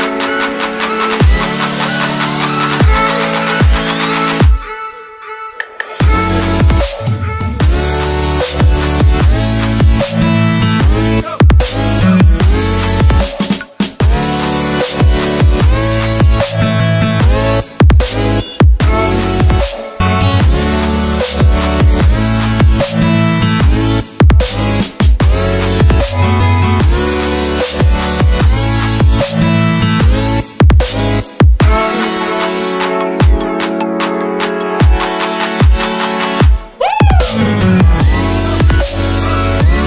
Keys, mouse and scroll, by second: 2.0 click, 6.8 click, 10.4 Delete, 11.4 click, 15.0 click, 19.2 Delete, 20.3 click, 26.5 Delete, 27.1 click, 28.1 Delete, 28.7 click, 31.3 s, 32.1 click, 35.9 click, 39.3 click.